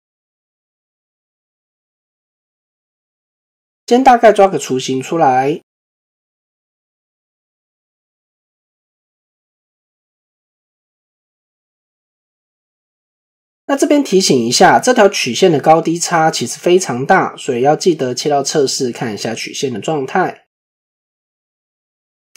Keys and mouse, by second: 0.4 click, 3.2-5.6 drag, 6.5-13.1 drag, 16.6 middle click.